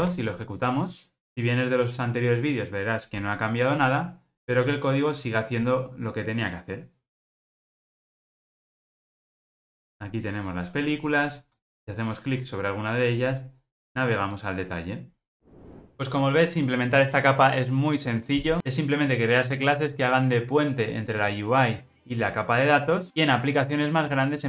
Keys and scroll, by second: 0.0 ctrl+r.